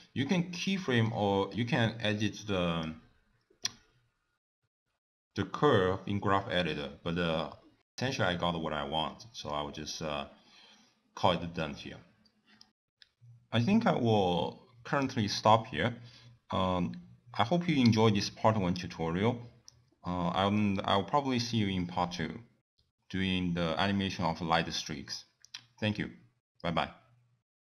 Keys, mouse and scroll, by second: 0.2 scroll up 2, 0.8 middle click, 1.6 click, 8.2 click, 8.7 click, 16.0 click, 17.1 middle click, 17.7 scroll up 3, 21.6 click, 22.5 middle click, 22.9-23.5 scroll down 8, 23.5 middle click, 24.3 click, 27.1 click.